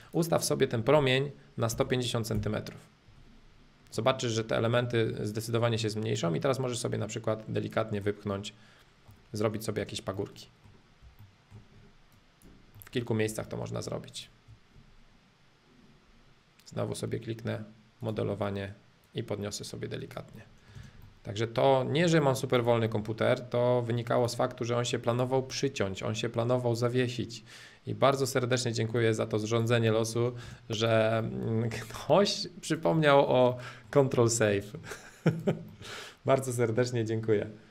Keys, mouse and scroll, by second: 0.0-2.0 drag, 3.9-5.9 middle drag, 6.4-8.0 drag, 8.0-9.8 middle drag, 9.8 space, 10.1 middle click, 11.3 shift+middle click, 12.1 click, 12.7 middle click, 13.4-15.4 shift+drag, 18.0-20.0 drag, 20.4 middle click, 20.7 space, 21.0-22.0 middle drag, 22.0 scroll up 2, 22.2 middle click, 22.6 click, 22.9 middle click, 23.1 scroll, 23.2 middle click, 24.2 ctrl+click, 25.1 ctrl+click, 28.0-29.9 drag, 29.9 middle click, 30.4 space, 30.8 click, 31.2-32.6 middle drag, 32.6 click, 32.9-34.2 middle drag, 34.2 scroll down 1, 34.4 middle click, 35.3 click, 35.7-37.7 middle drag.